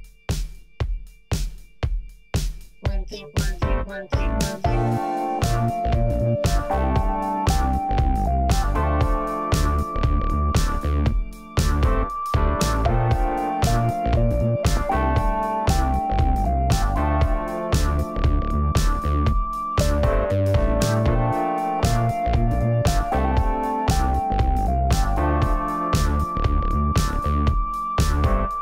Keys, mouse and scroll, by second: 0.2 shift+a, 0.9 scroll down 4, 1.2 s, 1.9 s, 2.5 scroll up 2, 2.8 middle click, 3.1-3.5 scroll up 2, 3.5 shift+middle click, 3.8-4.1 scroll down 3, 4.1 shift+middle click, 4.3-5.0 scroll up 2, 6.6 click, 7.8 click, 8.7-9.3 shift+middle drag, 9.3 ctrl+s, 9.6-11.2 scroll up 1, 11.2-14.4 shift+middle drag, 14.4 click, 14.5 shift+middle click, 15.0 Tab, 15.0 scroll up 3, 15.7 2, 16.4 click, 16.7-18.0 middle drag, 18.0 g, 19.1 middle click, 19.8 ctrl+b, 20.4 middle click, 21.3 g, 23.6 Tab, 23.8 scroll down 2, 24.0-24.8 middle drag, 24.8-25.2 scroll down 4, 25.2-25.8 shift+middle drag, 25.8 ctrl+s, 26.0 shift+middle drag, 26.2-27.1 scroll up 2, 27.1-28.6 shift+middle drag.